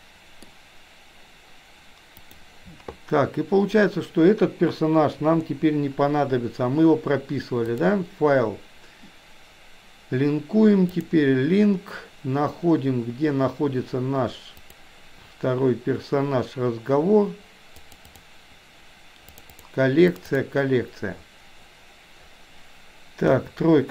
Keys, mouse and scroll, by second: 5.3 Delete, 7.7-11.2 drag, 23.3 KP_3.